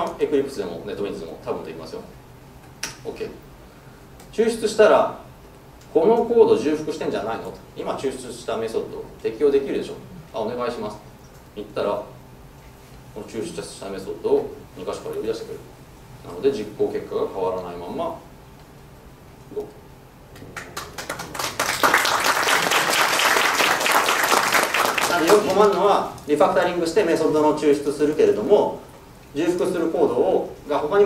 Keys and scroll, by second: 16.3 ctrl+shift+F10.